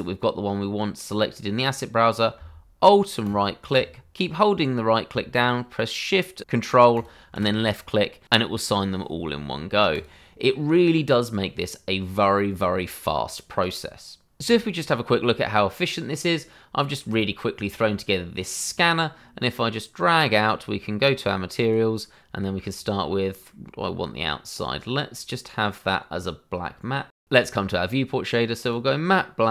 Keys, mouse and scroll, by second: 3.2 alt+right click, 6.9 right click, 9.9 click, 10.4-11.6 scroll down 1, 11.6-13.2 scroll up 1, 16.0 middle click, 19.4 click, 22.7-23.1 scroll down 1, 23.1 middle click, 23.9-25.2 scroll up 1, 27.5 click, 29.2 click.